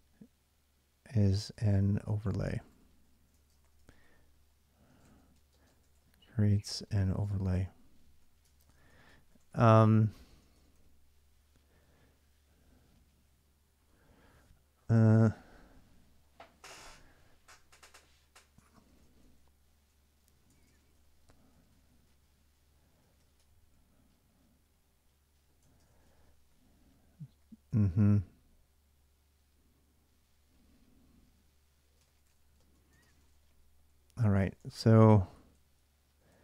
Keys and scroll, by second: 1.0-10.5 typing, 10.3 Return, 18.3-28.0 typing, 31.5-36.4 typing.